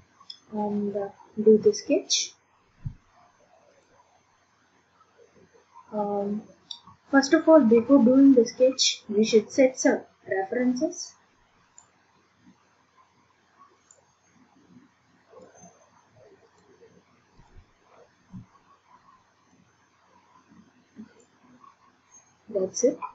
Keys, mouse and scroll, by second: 2.2 click, 4.0 click, 9.9 click, 11.8 click, 13.9 click, 15.4 click, 16.6 click, 17.5 click, 19.5 click, 21.4 click.